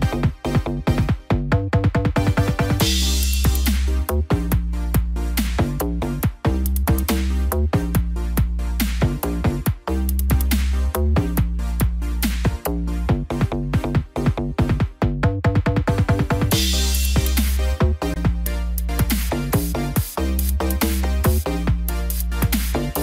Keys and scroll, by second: 1.7 ctrl+-.